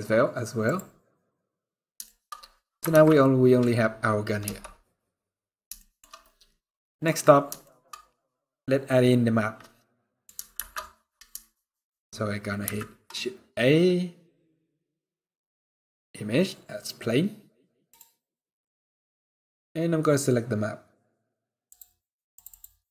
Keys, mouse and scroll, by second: 0.8 middle click, 1.7 shift+middle click, 2.0-2.4 scroll up 7, 2.8 ctrl+s, 2.9 middle click, 3.3 scroll down 1, 4.1 KP_0, 5.1-5.9 scroll up 4, 5.5 shift+middle click, 6.3 middle click, 6.8 scroll down 2, 7.3 shift+middle click, 10.2 shift+a, 12.3 shift+a, 21.3 click.